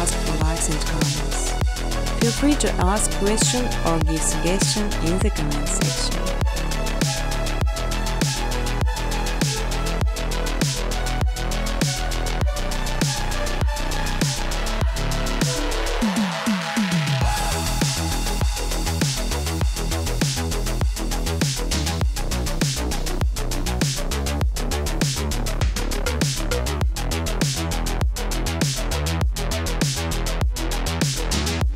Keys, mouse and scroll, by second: 4.0 click, 4.6 click, 5.3 click, 6.5 middle click, 7.8 click, 12.0 click, 13.9 click, 16.9 click, 18.5 click, 18.6-19.7 typing, 20.3 click, 22.1 click, 22.2 space, 26.1 space, 28.7 middle click, 28.8 middle click, 28.8 middle click, 29.1 middle click, 29.8 click.